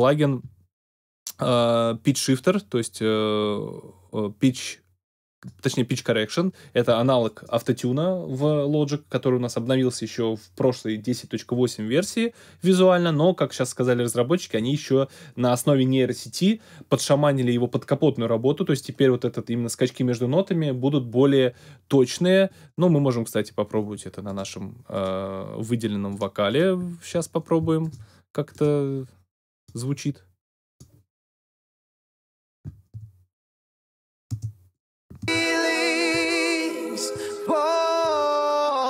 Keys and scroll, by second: 32.9 space, 34.3 space.